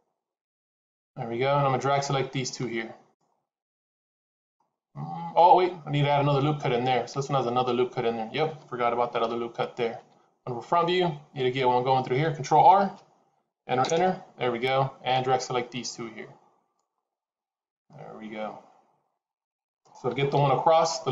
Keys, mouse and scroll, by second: 0.3 shift+z, 1.8 click, 4.4 middle click, 9.8 KP_1, 12.6 ctrl+r, 15.0 click, 17.7 middle click, 20.2 KP_1.